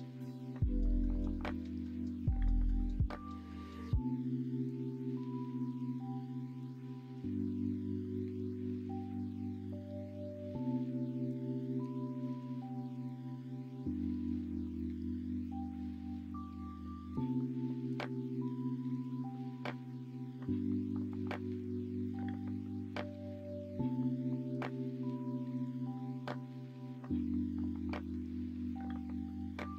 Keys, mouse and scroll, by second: 1.1 s, 2.7 s, 3.3-6.4 middle drag, 6.5 alt+h, 11.8 l, 12.9 s, 14.9 middle click, 15.7-16.8 middle drag, 17.1 alt+h, 18.5 /, 19.4 middle click, 20.3 Tab, 21.4-23.4 middle drag.